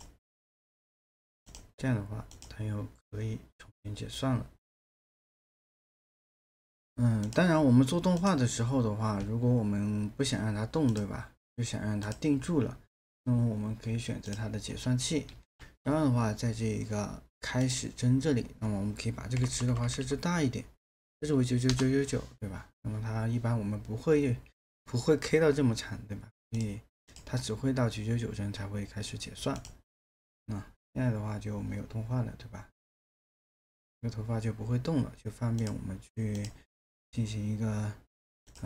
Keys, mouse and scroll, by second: 15.3 ctrl+a, 19.3 KP_9, 21.7 Return.